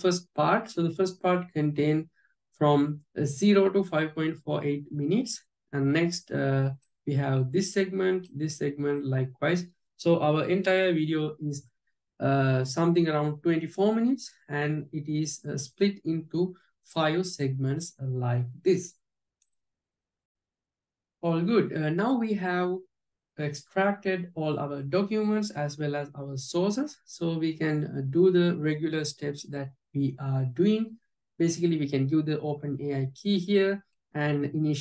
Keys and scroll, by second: 33.7 alt+j.